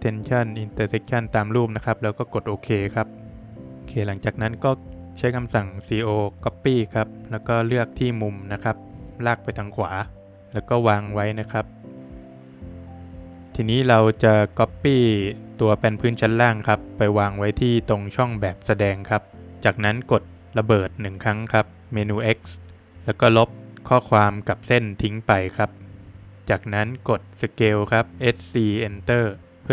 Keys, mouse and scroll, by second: 3.5 click, 3.9 Escape, 4.2 click, 6.5 space, 8.1 space, 8.2 click, 10.4 Return, 11.7 space, 11.9 Escape, 11.9 scroll up 2, 12.4 click, 12.8 middle click, 14.2 space, 14.7 click, 15.0 scroll up 2, 16.8 scroll up 1, 16.9 click, 17.4 Escape, 17.7 click, 19.1 space, 19.4 Escape, 19.4 scroll up 2, 20.2 click, 21.3 Delete, 21.8 click, 22.8 ctrl+z, 23.5 Escape, 23.6 Delete, 23.6 click, 23.8 click, 24.9 Escape, 25.4 click, 25.7 Delete, 26.0 click, 26.5 scroll up 1, 27.5 space.